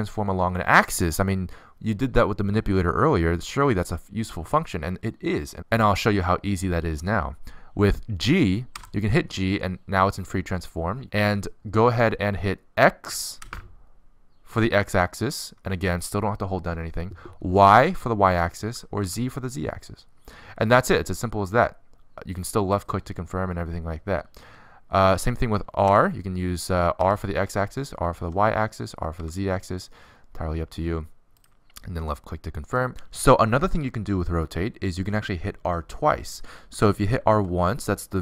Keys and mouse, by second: 9.4 g, 26.7 r, 38.1 r.